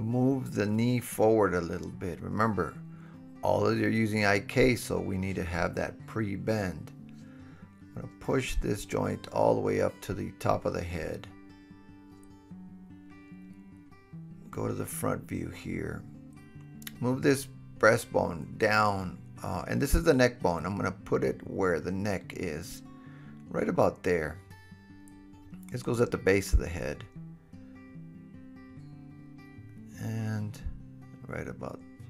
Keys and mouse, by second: 0.2 g, 5.1-9.6 middle drag, 8.5 g, 9.6-11.4 drag, 11.4-16.8 middle drag, 12.3 click, 12.3 right click, 12.5 click, 12.5 right click, 12.7 click, 12.7 right click, 15.0 KP_1, 16.8 g, 19.3 click, 22.8 g, 24.0-25.1 drag, 24.1 KP_3, 26.0 g, 28.2-28.6 drag, 29.1 f, 29.8 super+z, 30.2 g, 30.8-32.0 drag, 31.3-32.0 middle drag, 31.3-32.0 right drag, 31.9 g.